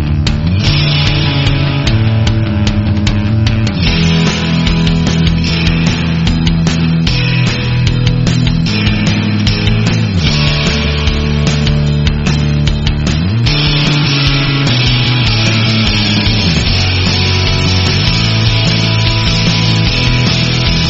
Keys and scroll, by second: 1.2 space, 1.7 super+space, 1.8 super+space, 2.3 super+space, 2.4 super+space, 3.6 space, 4.1 alt+super+space, 4.2 alt+super+space, 4.9 alt+super+space, 5.4 alt+super+space, 6.3 a, 8.4 super+z, 10.2 super+z, 10.7 super+space, 11.3 alt+super+space, 11.9-12.4 super+space, 12.9-14.6 typing, 18.3 shift+super+g, 18.4 shift+super+g.